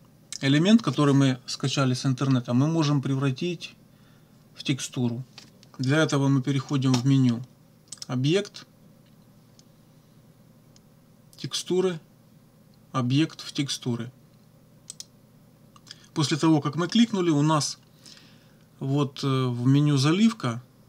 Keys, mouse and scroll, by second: 7.9 click, 14.9 click.